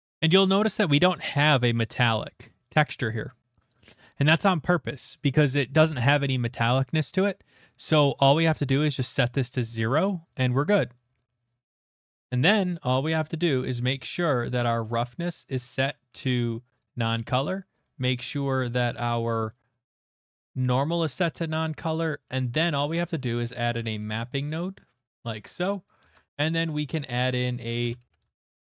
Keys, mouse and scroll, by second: 2.3 click, 3.5 click, 4.5 click, 7.3 click, 9.5 click, 10.3 click, 12.4 click, 13.4 click, 13.6 middle click, 13.7 middle click, 13.7 middle click, 14.2 middle click, 14.4 middle click, 14.5 middle click, 14.5 middle click, 15.6 click, 16.8 click, 17.8 click, 21.4 middle click, 21.6 scroll, 22.2-24.5 middle click, 22.2 scroll, 22.6-24.5 typing, 23.0 click, 25.0 middle click, 25.5 click, 25.9 click, 27.3 Caps_Lock, 27.6 click, 27.8-28.6 typing, 28.1 click.